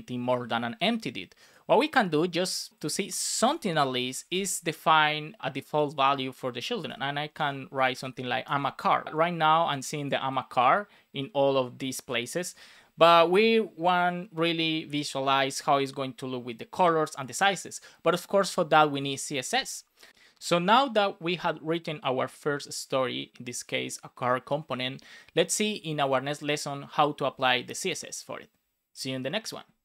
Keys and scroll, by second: 3.3 space, 4.0 space, 4.2 shift+1, 6.8 shift+\, 7.4 space, 8.4 super+s.